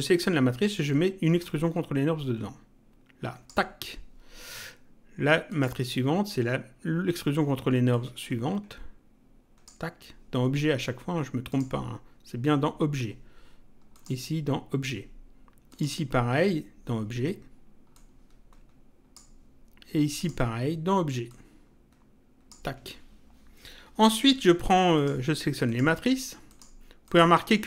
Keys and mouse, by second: 1.4 click, 5.5 click, 7.9 click, 11.5 click, 13.9 click, 15.7 click, 17.9 click, 20.2 click, 21.3 click, 24.9 click, 25.7 ctrl+click.